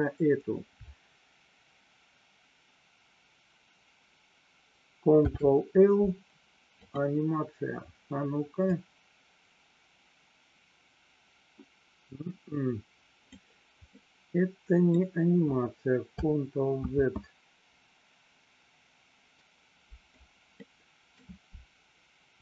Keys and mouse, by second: 5.3 ctrl+l, 9.0-13.6 drag, 14.0 middle click, 17.4 ctrl+z, 20.6 middle click.